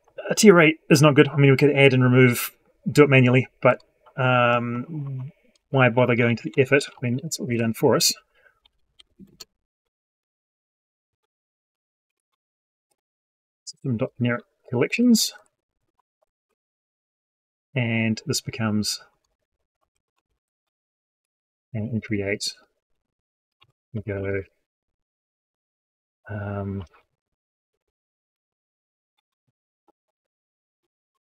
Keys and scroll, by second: 15.2 ctrl+Left, 22.2 ctrl+shift+Down.